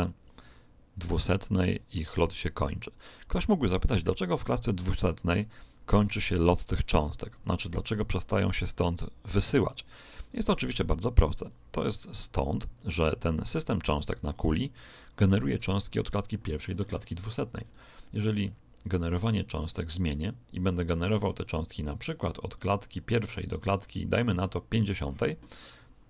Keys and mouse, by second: 11.4 click, 14.0 right click, 14.7-16.7 middle drag, 17.5-20.1 middle drag, 20.7 click.